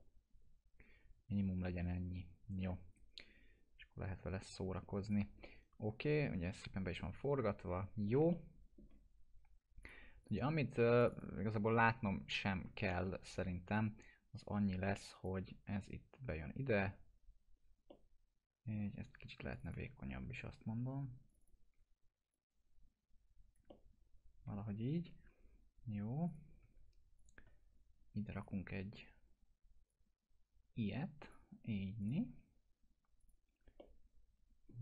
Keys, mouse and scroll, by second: 2.9 right click, 5.1 click, 5.5-8.3 alt+middle drag, 8.3-9.0 alt+middle drag, 9.8 click, 12.9 alt+middle click, 13.2 e, 13.8-15.3 drag, 15.7 scroll up 1, 16.2 scroll down 1, 17.9-18.8 alt+middle drag, 19.5 ctrl+click, 20.1 w, 21.3 ctrl+click, 22.3-23.6 drag, 23.7-24.6 alt+middle drag, 26.3 click, 27.2 shift+click, 28.4-32.0 drag, 30.2-31.5 drag, 33.8-34.7 alt+middle drag.